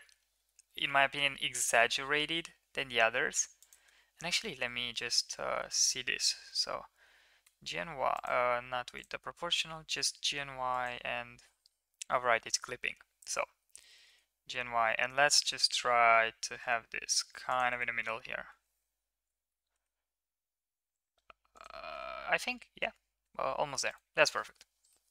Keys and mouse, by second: 0.3 g, 3.8 Tab, 5.6 a, 6.4 g, 8.9 click, 12.1 Tab, 13.6 g, 17.8 Tab, 18.5 Tab, 19.2 g, 21.9 Tab, 23.2 Tab, 24.9-25.1 middle drag.